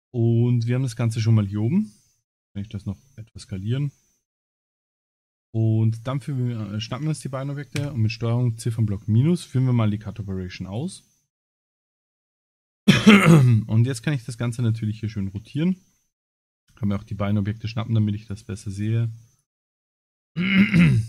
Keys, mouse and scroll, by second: 0.6 scroll up 3, 2.5 s, 4.5 click, 5.4 click, 6.2 click, 6.8 shift+click, 7.8 ctrl+KP_Subtract, 9.2 click, 9.7 middle click, 10.6 click, 11.7 r, 15.5 shift+click, 16.4 KP_Divide, 17.1 middle click, 18.2 click, 18.7 click, 20.5 middle click.